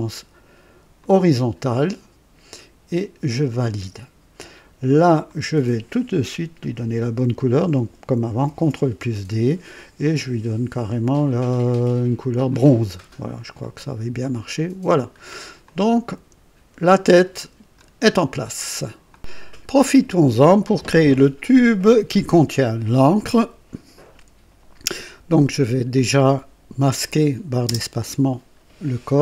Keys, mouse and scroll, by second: 0.9 click, 3.4 click, 5.2 click, 8.4 ctrl+d, 8.4 ctrl+d, 10.0 click, 12.4 click, 13.6 click, 14.2 click, 15.0 scroll down 1, 15.6-17.9 drag, 19.0 click, 25.9 click, 27.6 space.